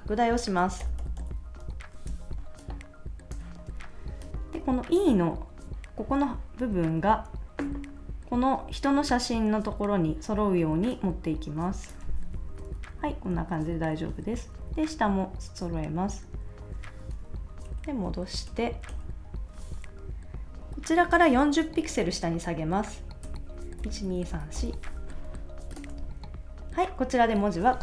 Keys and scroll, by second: 0.8 shift+super+;, 2.1 space, 12.4 Left, 13.3 Right, 14.3 Up, 15.8 Up, 17.7 super+-, 23.8 shift+Down, 25.9 super+s.